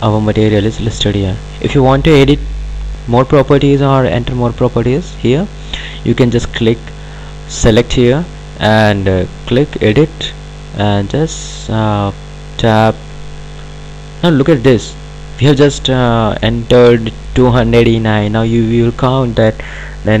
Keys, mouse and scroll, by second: 9.3 click, 12.1 click, 15.1 click.